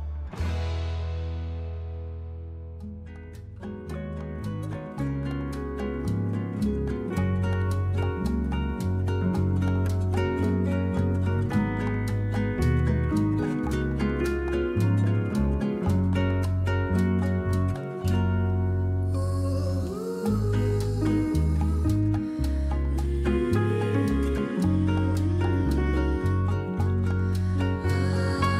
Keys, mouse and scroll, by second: 2.3 middle click, 3.6 middle click, 14.5 middle click, 21.3 click.